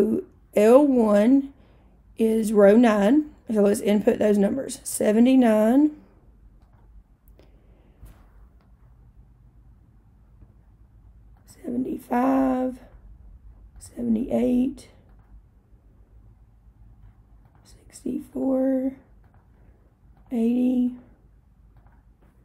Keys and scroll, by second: 4.9 7, 5.7 9, 6.7 Return, 11.4 7, 12.1 5, 12.9 Return, 13.8 7, 14.3 8, 15.2 Return, 17.5 6, 18.4 4, 19.3 Return, 20.2 8, 20.9 0, 21.8 Return.